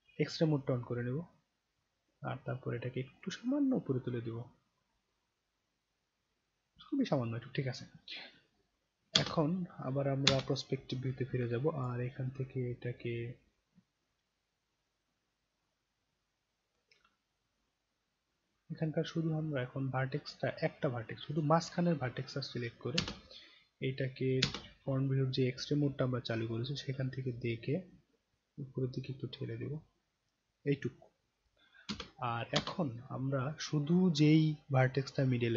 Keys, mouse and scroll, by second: 2.0-2.4 scroll up 1, 3.1 click, 4.4 click, 9.1 space, 10.3 space, 11.4-11.9 alt+drag, 12.2-12.7 alt+middle drag, 12.9-13.5 alt+right drag, 13.8-14.2 alt+middle drag, 14.9-16.7 alt+drag, 17.8-20.3 right drag, 21.3 click, 21.3 right click, 23.0 space, 26.0-26.4 alt+middle drag, 26.6 alt+right click, 27.7-30.7 drag, 31.9 space, 32.5 space.